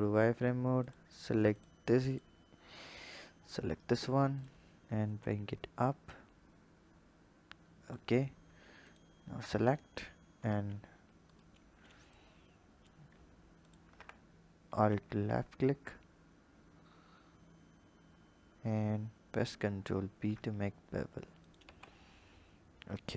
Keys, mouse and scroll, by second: 0.8 alt+click, 1.5 alt+click, 2.1 alt+click, 3.3 scroll up 1, 4.4 click, 5.6 click, 8.8 alt+shift+click, 10.4 ctrl+b, 12.2 click, 13.6 alt+shift+click, 14.8 ctrl+b, 21.7 Tab.